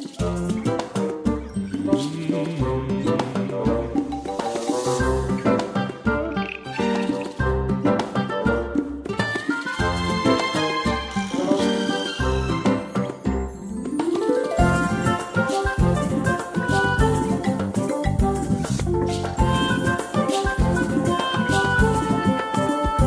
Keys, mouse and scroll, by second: 7.4 click, 22.3 click.